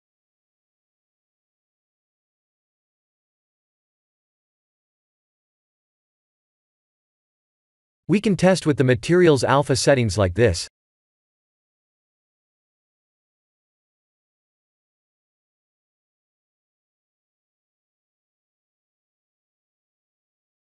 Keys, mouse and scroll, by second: 0.2 click, 2.0-2.9 scroll down 4, 2.9-3.2 scroll down 2, 3.8-5.1 scroll up 4, 5.7 click, 6.2 click, 6.6-7.4 scroll down 9, 7.9 scroll down 11, 8.5 click, 8.5-9.3 scroll down 2, 11.4 click, 12.7 click, 15.2-15.8 scroll up 6, 17.2 shift+middle click, 19.0 click.